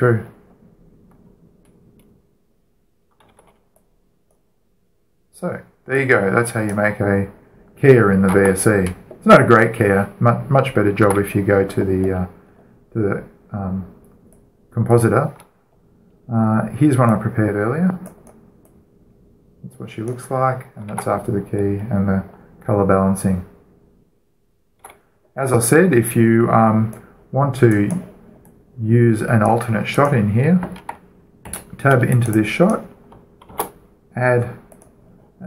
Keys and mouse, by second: 1.2-3.2 middle drag, 4.0 alt+a, 4.5-8.1 drag, 8.2 click, 8.7-9.0 drag, 9.0 alt+a, 11.7 alt+a, 12.8 middle click, 13.2-14.6 drag, 14.9-17.2 drag, 17.4 middle click, 17.8-20.5 right drag, 18.9-22.6 drag, 21.6 alt+a, 22.6-25.3 middle drag, 25.6 alt+a, 27.7-28.9 right drag, 28.5 click, 30.1-30.6 drag, 32.0 right click, 32.1 Tab, 32.8-35.1 drag, 34.1 shift+a, 35.4 click.